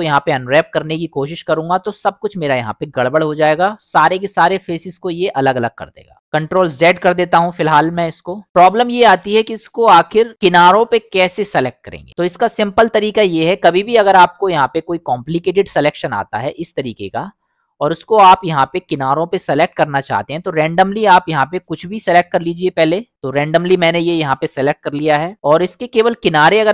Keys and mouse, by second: 6.6 ctrl+z, 7.0 ctrl+z, 9.2 middle click, 12.1 middle click, 13.7 click, 14.5 middle click, 15.4-16.5 drag, 17.1 middle click, 19.5 click, 22.2 click, 23.5-25.3 middle drag.